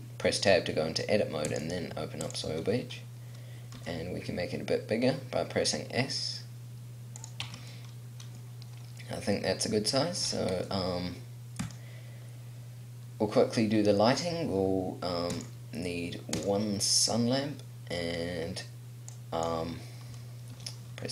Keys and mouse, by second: 4.0 s, 7.7 Tab, 8.2 click, 10.0 middle click, 11.9-15.5 right drag, 17.9 click, 19.3-21.1 drag, 20.7 r.